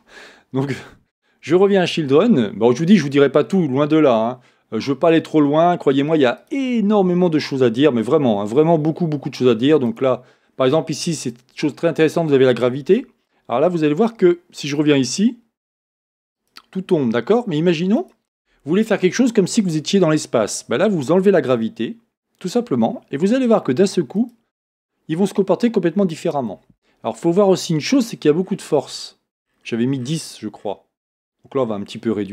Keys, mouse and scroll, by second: 4.2-6.5 scroll down 1, 6.5-10.2 drag, 10.4-12.6 scroll down 1, 14.0-17.3 drag, 18.0-19.4 drag, 21.5-26.5 drag, 28.5-29.0 scroll up 1.